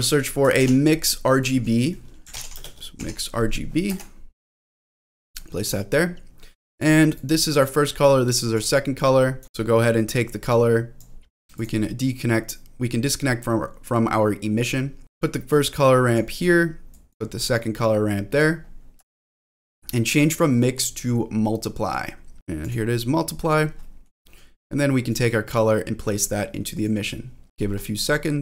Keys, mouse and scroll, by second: 0.0 click, 0.5 shift+a, 5.3 middle click, 6.6 click, 7.1 click, 8.0 click, 9.0 click, 10.5-11.6 drag, 12.3-14.6 drag, 15.2 click, 16.4-16.9 scroll down 1, 16.9 click, 17.6 click, 18.6-18.9 scroll up 2, 19.1 shift+middle click, 20.1-22.7 drag, 23.8 middle click, 25.1-26.9 drag, 27.4-28.4 scroll down 2.